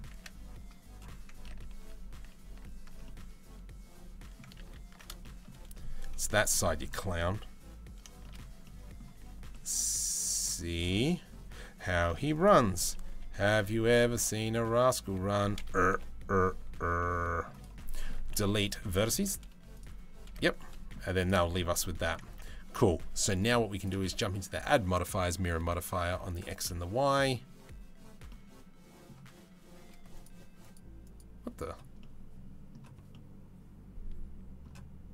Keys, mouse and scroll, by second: 1.1 ctrl+z, 1.3 ctrl+z, 2.1 ctrl+z, 2.6-4.0 middle drag, 4.2 ctrl+z, 4.8 shift+middle click, 6.1 middle click, 7.8 shift+middle click, 8.3 middle click, 10.5 middle click, 10.5 c, 11.1 c, 12.7 KP_7, 14.1 middle click, 15.5 KP_7, 16.2 c, 17.4 middle click, 17.9 Delete, 18.7 z, 19.9 a, 20.2 middle click, 20.6 z, 21.4 middle click, 21.9 Tab, 23.0 right click, 23.5-24.9 right drag, 25.9 right click, 26.3-26.9 middle drag, 27.9-28.7 middle drag, 29.7 middle click, 30.2 middle click, 30.6-32.3 middle drag, 32.7-34.2 middle drag.